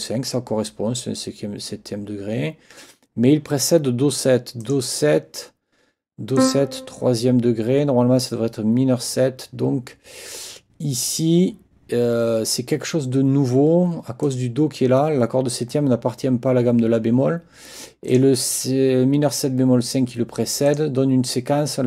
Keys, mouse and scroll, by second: 4.6 click, 6.3 click, 14.2 click, 18.1 click, 20.7 click.